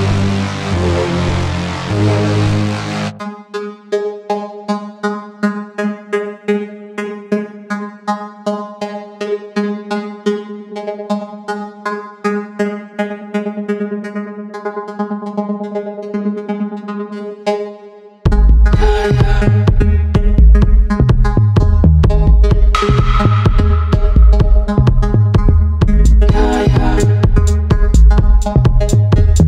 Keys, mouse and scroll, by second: 0.0 click, 2.9 click, 13.6 click, 14.5 ctrl+alt+click, 18.8 click, 22.2 click.